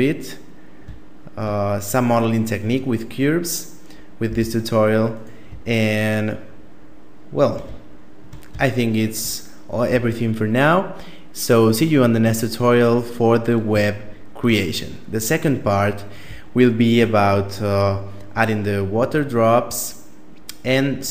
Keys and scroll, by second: 3.5 a.